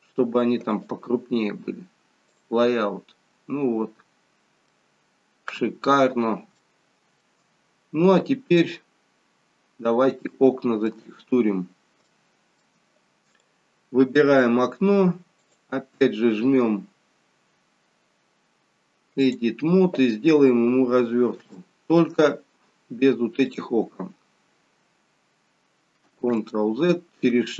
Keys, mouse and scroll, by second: 2.5 click, 3.7-4.6 scroll down 1, 4.6 scroll down 4, 4.7 middle click, 6.7 shift+middle click, 10.4 shift+middle click, 11.2-11.6 scroll up 1, 11.6-12.1 scroll down 1, 12.1 scroll down 1, 12.2 shift+middle click, 13.3 click, 15.4 click, 21.7 shift+middle click, 22.3-23.6 scroll up 3, 23.6 click, 23.6-24.2 scroll up 1, 26.4 ctrl+z.